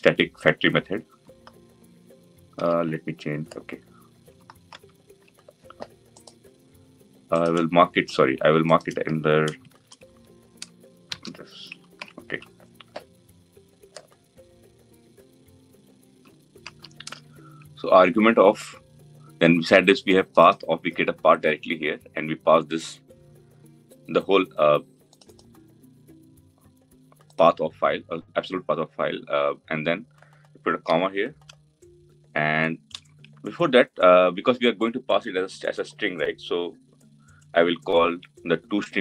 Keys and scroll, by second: 2.3 ctrl+x, 4.3 ctrl+x, 4.4 ctrl+z, 9.7 Delete, 11.6 Delete, 11.6 ctrl+v.